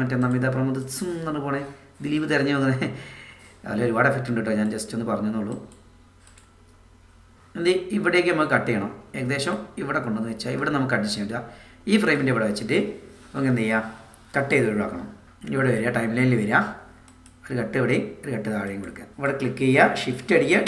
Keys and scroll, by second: 19.1 BackSpace.